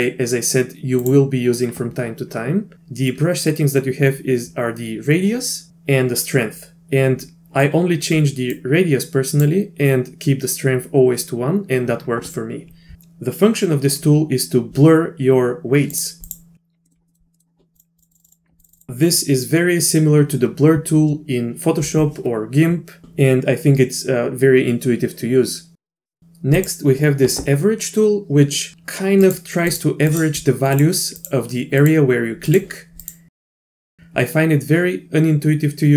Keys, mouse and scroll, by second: 5.7 f, 8.6 click, 15.9 click, 16.3 click, 16.9 middle click, 17.1 click, 17.3 middle click, 17.8 click, 18.0 click, 18.1 click, 18.2 click, 18.3 click, 18.6 click, 18.7 click, 18.8 click, 26.6 click, 29.2 click, 29.7 click, 30.1 click, 30.7 click, 31.2 click, 31.8 click, 32.5 click, 33.0 click, 33.3 click, 33.4 click, 33.4 click, 33.5 click, 33.6 click, 33.7 click.